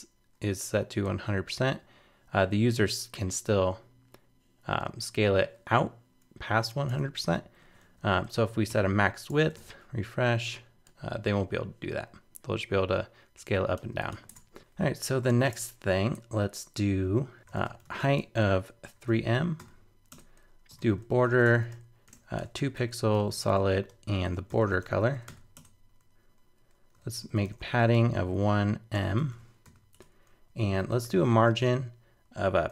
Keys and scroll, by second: 6.9 super+Tab, 7.8 super+z, 8.7 super+/, 9.1 super+s, 9.3 super+Tab, 9.6 super+r, 14.3 super+Tab.